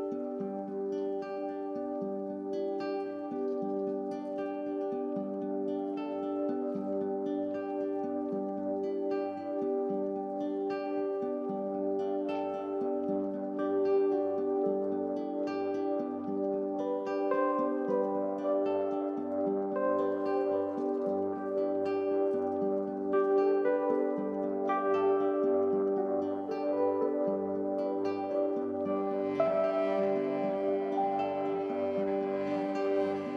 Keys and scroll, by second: 3.8 ctrl+z, 17.3 ctrl+t, 26.7 7, 31.4 Down, 31.6 Down, 31.8 Down, 31.9 Down, 32.1 Down.